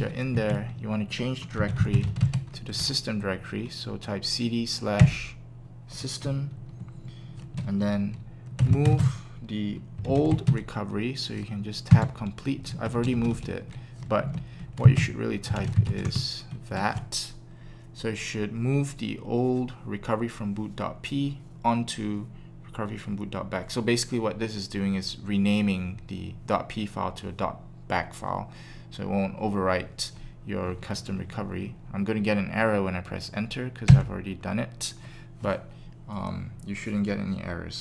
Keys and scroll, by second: 1.3-2.2 typing, 5.0 Return, 8.3-10.6 typing, 11.9 Tab, 14.2 typing, 15.2-17.8 typing, 33.8 Return.